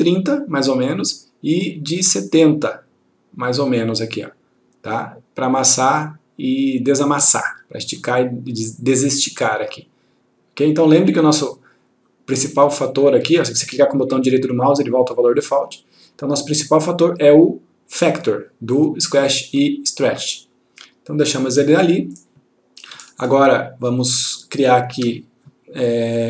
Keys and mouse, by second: 12.7 right click, 25.0 F1.